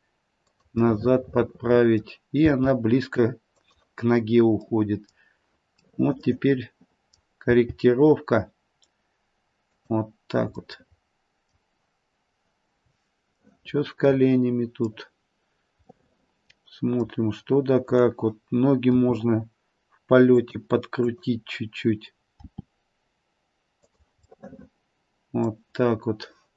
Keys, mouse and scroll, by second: 0.8 middle click, 1.2 middle click, 2.4 g, 4.7 middle click, 5.8 middle click, 6.0 middle click, 6.2 middle click, 6.8 middle click, 7.4 middle click, 7.4 g, 10.6 middle click, 13.4 middle click, 15.9 middle click, 17.8 click, 20.9 click, 20.9 r, 22.4 r, 24.3 middle click, 25.9-26.5 scroll down 2.